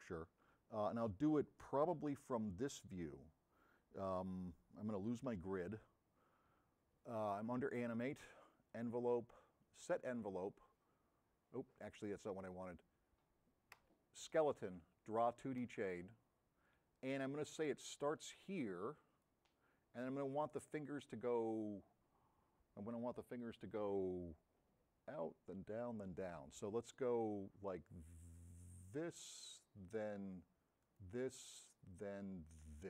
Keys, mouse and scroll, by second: 12.0 click, 28.9 click, 32.6 click.